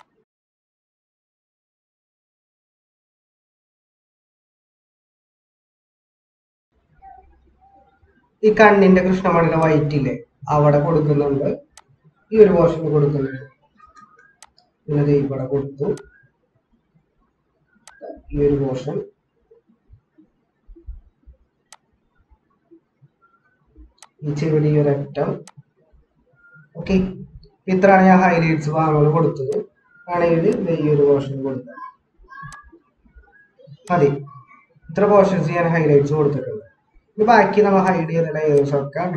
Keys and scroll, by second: 2.4 ctrl+-, 3.5 ctrl+=, 5.8 ctrl+-, 13.8 [, 16.0 typing, 19.4 ctrl+-, 26.4 ctrl+-, 27.4 ctrl+-, 27.6 ctrl+-, 29.0 ctrl+=, 33.1 ctrl+-.